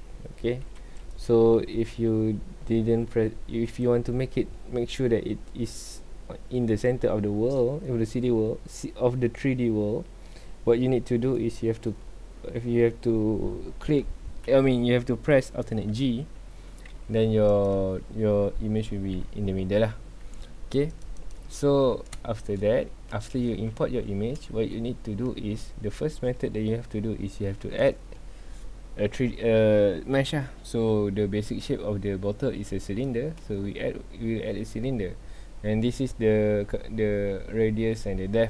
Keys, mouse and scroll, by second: 1.0 click, 1.9 scroll up 1, 2.3 g, 17.1 g, 18.9 alt+g, 20.9 click, 21.9-22.3 scroll down 1, 22.3 shift+middle click, 22.6-23.1 scroll up 2, 23.1-27.5 shift+middle drag, 27.5 shift+a.